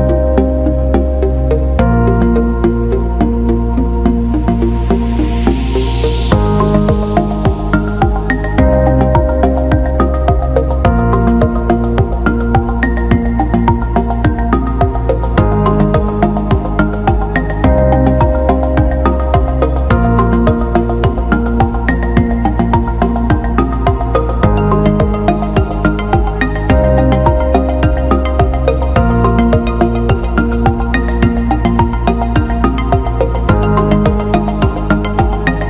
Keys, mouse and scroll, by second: 1.0 click, 2.1 alt+middle click, 3.1 click, 5.1 alt+middle click, 5.8 click, 6.6-8.5 drag, 9.1-11.0 drag, 11.1 alt+middle click, 11.8 alt+shift+middle click, 13.2 click, 16.5-20.7 drag, 21.2 alt+middle click, 22.5 alt+shift+middle click, 23.6-24.9 drag, 25.2 alt+middle click, 26.4 click, 28.2 alt+middle click, 29.7 click, 31.0-34.1 drag.